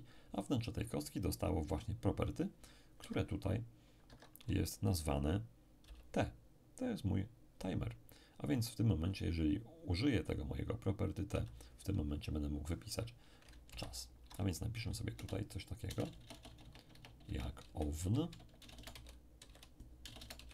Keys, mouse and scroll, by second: 1.6 t, 3.0 Escape, 4.0 Escape, 5.8 n, 11.3 n, 13.6 ctrl+shift+Right, 15.1 BackSpace, 15.8 BackSpace, 16.0 BackSpace, 17.6-20.5 typing.